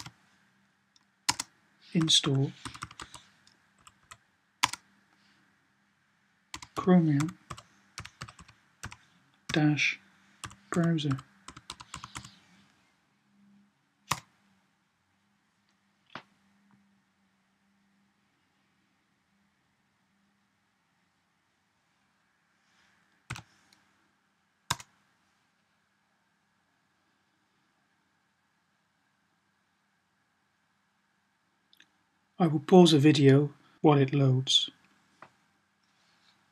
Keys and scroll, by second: 0.0-0.3 typing, 1.6-3.9 typing, 6.2-12.5 typing, 23.0 y.